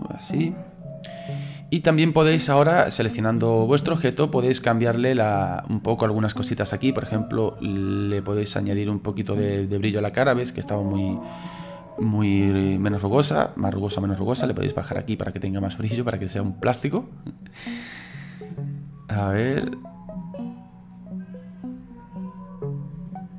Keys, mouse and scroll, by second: 0.1 click, 0.6 middle click, 1.6 scroll up 3, 1.9 middle click, 2.9 right click, 3.4-4.9 middle drag, 4.9 click, 7.7-10.5 drag, 11.8-13.2 middle drag, 13.2-15.1 scroll up 1, 15.1-18.0 drag, 19.2-23.3 drag.